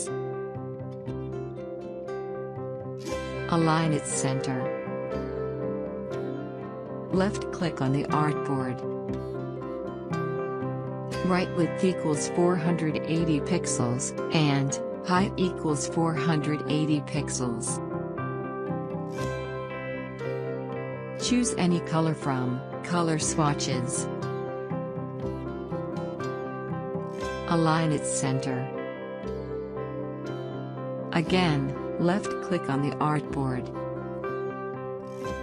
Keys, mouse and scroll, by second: 1.3 click, 12.8 4, 14.3-15.3 typing, 16.2 Tab, 19.2 click, 22.8-35.4 drag.